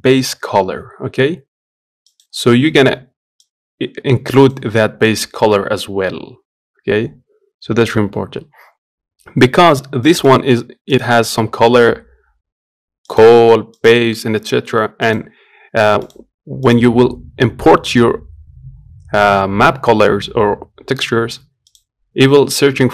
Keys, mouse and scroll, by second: 16.4-22.9 drag.